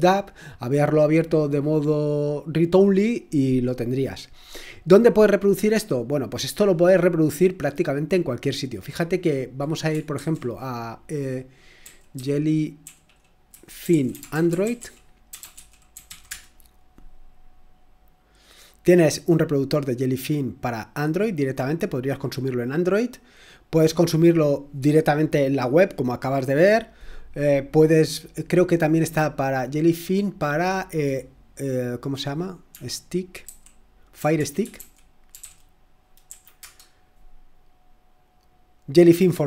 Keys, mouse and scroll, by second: 9.0 click, 10.1 ctrl+a, 11.8-16.5 typing, 19.3 click, 23.4 click, 29.3 click, 29.8 click, 30.1 click, 32.7-35.8 typing, 36.2 Down, 36.5 Return, 39.3 typing.